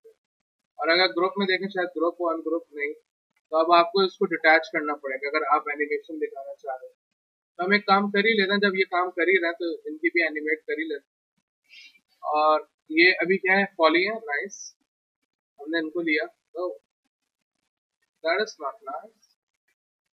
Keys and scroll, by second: 8.4 w, 14.3 4, 19.6 alt+q.